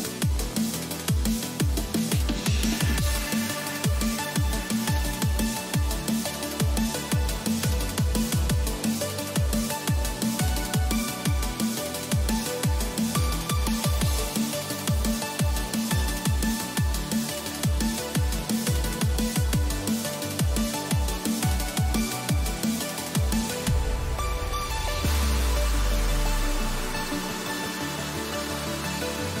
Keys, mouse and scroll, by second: 7.8-12.3 middle drag, 13.3-15.1 middle drag, 17.1-19.6 middle drag, 19.6-21.3 right drag, 20.1-24.4 middle drag, 24.4-27.8 drag, 27.4-29.4 middle drag, 27.8 a.